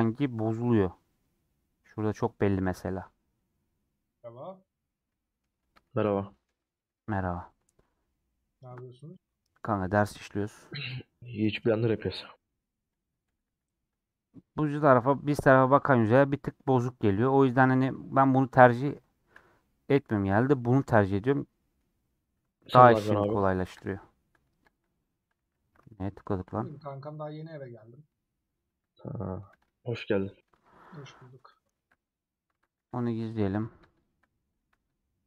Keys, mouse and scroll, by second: 0.8-1.6 scroll up 1, 1.6-2.8 scroll up 2, 2.8-3.3 scroll up 1, 3.3-4.7 scroll down 1, 4.7 scroll down 2, 5.0 middle click, 5.5 scroll up 1, 5.7 shift+middle click, 6.7 scroll up 1, 6.8 middle click, 7.6 scroll down 1, 7.7-9.6 middle drag, 9.6 scroll down 1, 12.1 s, 14.7 scroll down 2, 15.2-17.4 middle drag, 17.4 Tab, 18.2-18.6 scroll down 1, 18.6 scroll up 1, 18.7-19.9 middle drag, 19.9 scroll up 1, 20.3 click, 20.5-21.9 shift+middle drag, 21.9 scroll down 1, 22.0 scroll up 1, 22.9-23.4 scroll down 4, 23.4 click, 26.2 middle click, 26.7-27.7 drag, 28.8 middle click, 29.4 x, 30.0 click, 30.1 x, 31.1 middle click, 32.0 Tab, 32.6 Tab, 32.9 middle click, 33.5 click, 34.8-35.2 middle drag.